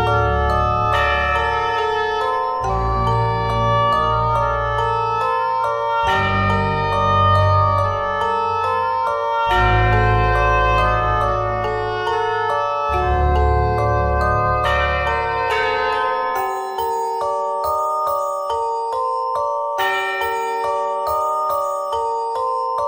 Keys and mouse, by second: 2.2 right click, 2.4 e, 4.6-7.5 drag, 7.7-9.2 drag, 9.4-11.8 drag, 11.8 ctrl+r, 15.6 ctrl+r, 17.5-18.9 drag, 20.7 Tab, 22.4 Tab.